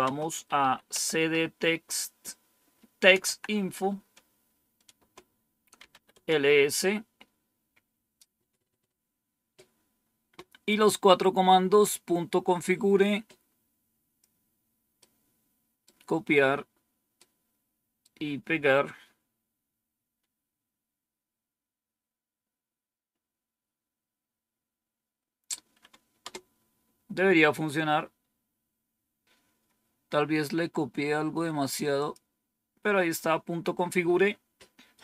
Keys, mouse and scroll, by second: 0.0-3.4 typing, 4.8 Return, 5.4-6.2 typing, 12.5-14.1 drag, 14.9 right click, 17.1 right click, 26.1 Return, 31.9 click.